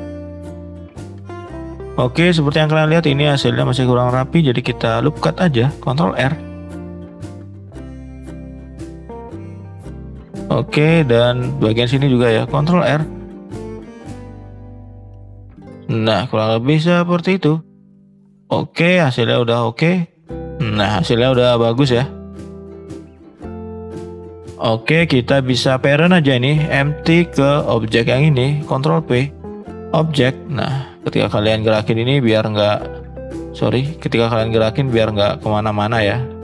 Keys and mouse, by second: 0.1 middle drag, 0.8-1.1 middle drag, 1.3 middle drag, 1.9 Tab, 3.0 middle click, 4.3 shift+middle click, 4.9 Tab, 5.1-5.5 middle drag, 6.1 ctrl+r, 9.8-10.7 middle drag, 11.1 shift+middle click, 11.6 middle click, 12.8 ctrl+r, 15.5 middle click, 17.0 click, 18.5-18.9 middle drag, 19.7 middle click, 20.4-20.7 middle drag, 21.4-21.8 middle drag, 22.2 middle drag, 22.9-23.2 middle drag, 23.6 middle click, 24.1-24.5 drag, 24.5 middle drag, 25.1 middle click, 26.3 click, 27.4 shift+click, 27.8 middle click, 28.9 ctrl+p, 30.3 click, 30.6 middle click, 31.2 click, 31.9 click, 33.6 ctrl+z, 34.4 click.